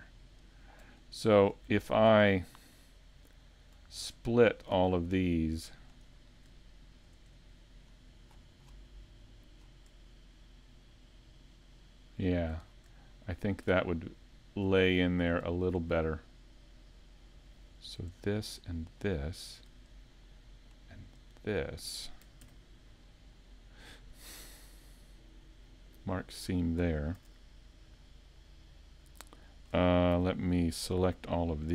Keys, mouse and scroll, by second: 0.5 right click, 1.4 shift+right click, 1.9 scroll down 3, 2.3 shift+middle click, 4.6 shift+right click, 5.0 middle click, 6.1 scroll up 1, 7.5 middle click, 7.5 scroll up 3, 12.7-13.2 scroll down 3, 13.1 shift+middle click, 14.8 middle click, 15.5 shift+middle click, 15.9 scroll up 3, 16.4 scroll down 1, 21.4 shift+right click, 22.4 ctrl+e, 30.1 scroll down 3.